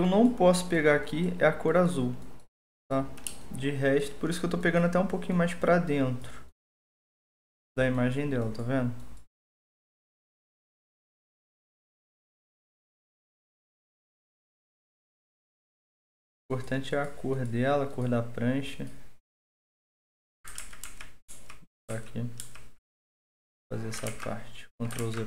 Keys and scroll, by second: 20.5 ctrl+z, 20.8 ctrl+z, 21.3 ctrl+z, 21.8 ctrl+z, 22.6 ctrl+z, 24.0 ctrl+z, 25.0 ctrl+z.